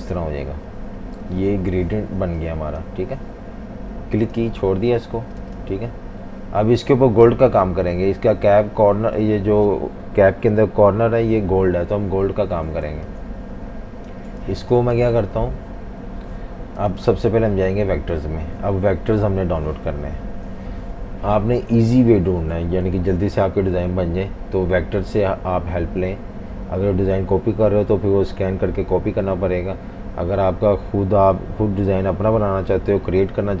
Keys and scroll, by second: 12.9 typing, 14.4 v, 14.6 space, 16.9 super+-, 20.5 F18.